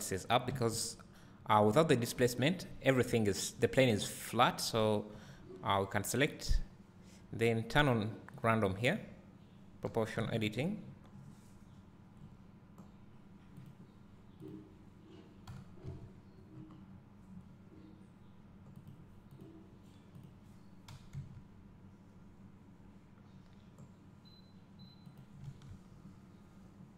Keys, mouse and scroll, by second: 0.5 scroll up 1, 1.8 Tab, 3.4 `, 5.1 Tab, 9.5-14.0 drag, 9.5 scroll up 1, 10.3 g, 15.5 g, 19.0 click, 21.1 g, 26.4 Tab.